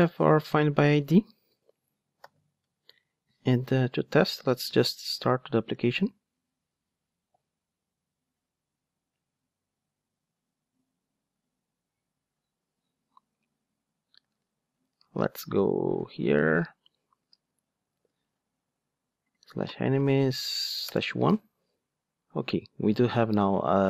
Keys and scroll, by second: 1.4 alt+super+l, 4.6 ctrl+d.